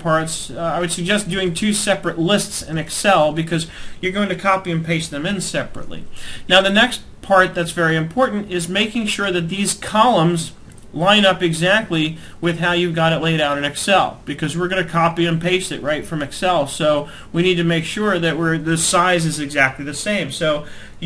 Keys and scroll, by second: 0.9 alt+Tab.